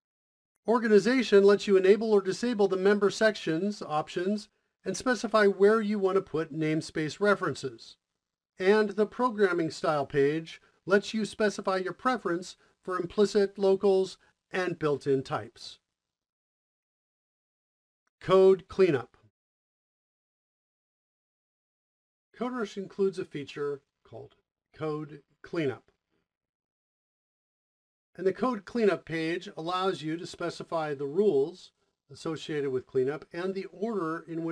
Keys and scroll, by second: 17.1 o, 19.0-19.7 typing, 27.9 ctrl+z.